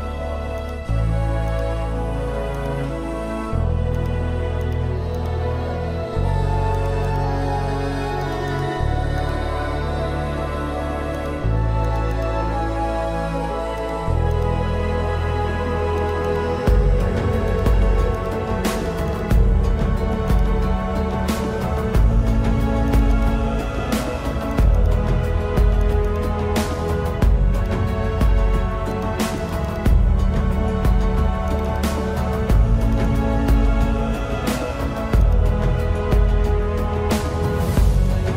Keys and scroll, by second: 0.5 space, 1.1 space, 3.3 ctrl+-, 3.9 ctrl+-, 4.3 space, 5.5 space, 6.8 space, 8.9 ctrl+-, 9.3 ctrl+-, 9.8 ctrl+-, 14.2 ctrl+alt+z, 16.0 ctrl+-, 16.4 ctrl+-, 17.5 ctrl+-, 17.7 space, 22.9 space, 25.9 space, 27.1 space, 31.3 ctrl+-, 36.3 space, 37.2 ctrl+alt+z.